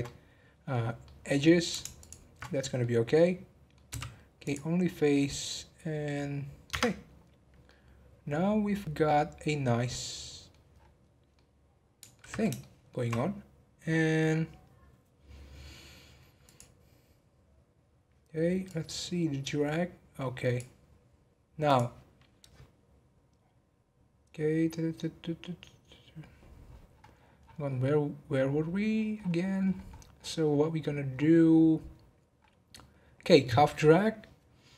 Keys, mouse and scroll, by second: 0.0-1.3 middle drag, 1.3-2.0 scroll up 1, 2.0 alt+shift+click, 2.5 scroll up 1, 2.6-3.9 middle drag, 3.9 x, 4.8 scroll down 1, 5.1-6.7 middle drag, 6.7 Tab, 7.0 scroll down 1, 7.6-10.6 middle drag, 10.7-11.3 scroll down 9, 11.3-13.1 middle drag, 13.1-15.6 scroll up 1, 15.6-16.4 scroll down 1, 16.4 click, 18.6-21.7 drag.